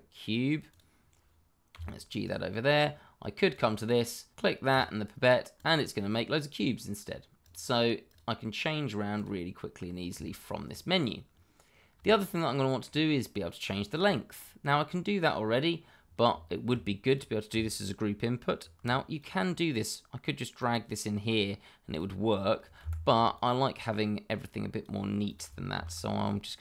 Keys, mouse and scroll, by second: 0.7 click, 1.7 g, 2.2 click, 9.7 scroll up 1, 10.2 shift+middle click, 11.6 scroll down 1, 12.1 shift+middle click, 14.0 shift+middle click, 14.1 middle click, 14.1 shift+middle click, 16.4 shift+middle click, 16.5 middle click, 16.5 shift+middle click, 17.0 click, 19.1 click, 22.8 Escape, 23.3 click, 25.7 shift+d.